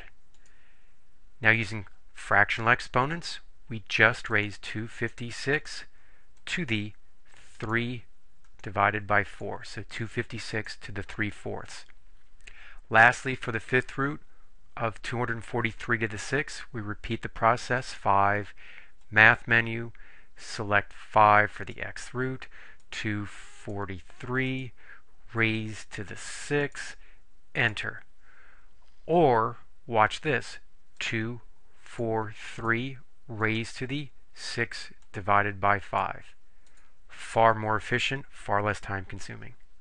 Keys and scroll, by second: 0.5 Return, 4.4 2, 5.1 5, 5.6 6, 6.6 ^, 7.7 3, 9.4 4, 10.6 Return, 18.0 5, 21.8 5, 23.0 2, 23.8 4, 24.6 3, 25.7 ^, 26.8 6, 27.7 Return, 31.1-36.0 typing, 36.8 Return.